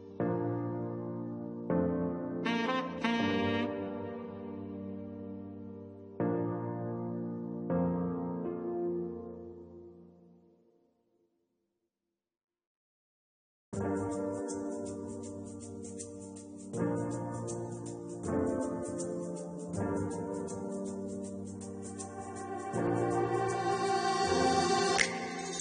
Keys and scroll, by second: 10.9 9, 11.8 2, 14.3 Return.